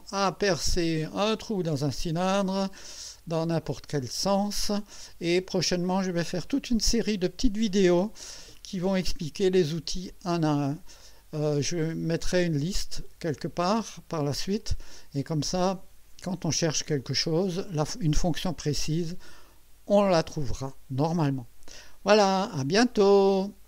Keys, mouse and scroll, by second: 3.0-4.8 drag, 5.1 scroll up 1, 5.7 right click.